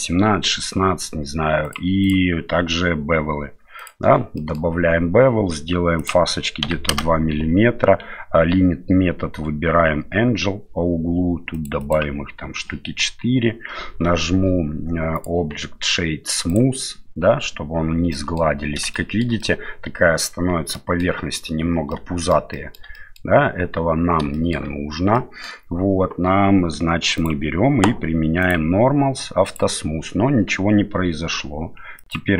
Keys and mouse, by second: 1.6 click, 2.2-3.9 drag, 4.4 middle click, 6.0-7.5 drag, 11.8 click, 15.2-16.6 drag, 18.1 middle drag, 18.9-19.2 shift+middle drag, 19.4-20.2 middle drag, 20.7 middle click, 21.9-22.3 shift+middle drag, 22.5 shift+middle drag, 22.9 middle drag, 24.3 shift+middle drag, 25.1-25.5 middle drag, 27.2 click, 28.5 click, 29.5 click, 32.0 click.